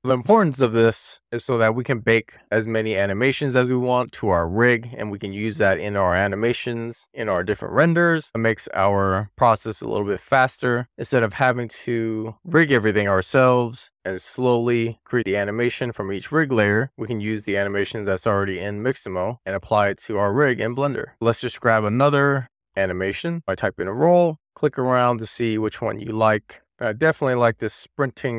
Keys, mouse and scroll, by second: 1.0 click, 1.7 middle click, 2.9 middle click, 5.0-6.0 middle drag, 8.7-12.5 drag, 13.8 middle click, 14.3 middle click, 14.7 middle click, 15.1-15.6 middle drag, 15.9 middle drag, 16.1 middle drag, 16.5-17.7 middle drag, 17.9 middle drag, 18.3 shift+middle drag, 18.8-20.1 middle drag, 20.3-20.8 shift+middle drag.